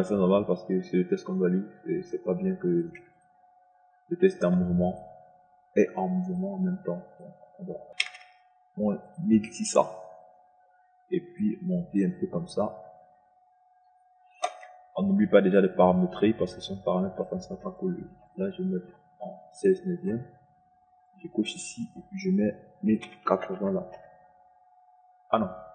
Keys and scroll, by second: 3.4 KP_0, 8.3 KP_6, 8.7 KP_0, 23.3 KP_1, 23.6 KP_0, 24.0 KP_8, 24.6 KP_0.